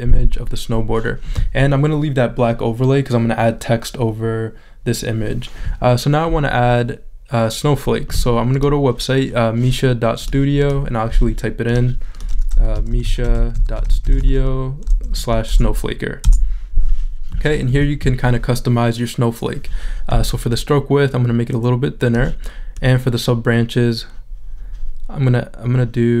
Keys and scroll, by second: 12.8 m, 14.8 o, 15.3 Right, 16.2 Return.